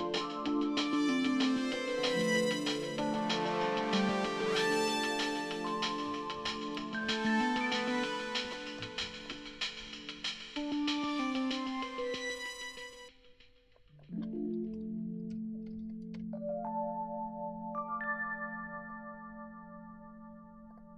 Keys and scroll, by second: 5.8-7.0 typing, 7.0 Return, 14.6-16.2 typing.